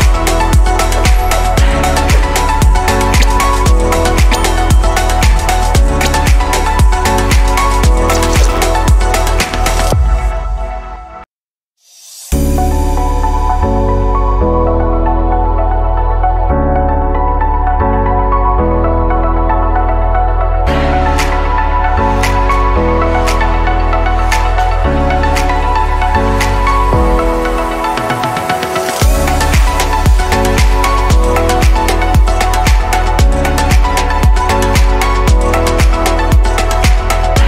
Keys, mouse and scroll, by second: 0.0 click, 1.6-3.4 drag, 6.7-9.3 middle drag, 9.3 s, 14.6-15.3 scroll down 3, 15.3-18.3 middle drag, 20.1-21.8 scroll down 1, 21.8 click, 24.0-25.5 drag, 26.7 Delete, 29.3-30.2 scroll down 5, 30.2-33.8 middle drag.